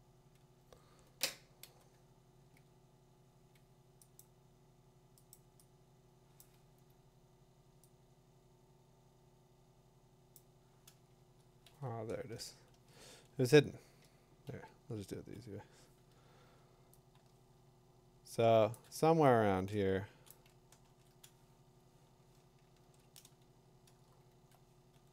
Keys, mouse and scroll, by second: 3.8 Tab, 4.2 click, 5.3 click, 6.4 click, 6.7 Escape, 10.3 click, 11.7 ctrl+a, 12.1 BackSpace, 12.7 ctrl+d, 14.5-15.3 [, 15.7 [, 18.7 shift+click, 20.9 ctrl+t, 21.6 Escape, 22.8 ctrl+j, 22.8 click, 23.8 click.